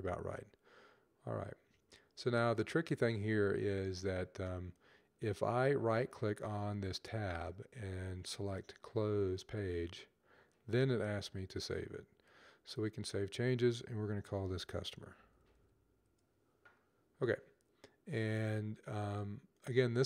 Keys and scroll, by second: 13.8-15.9 typing.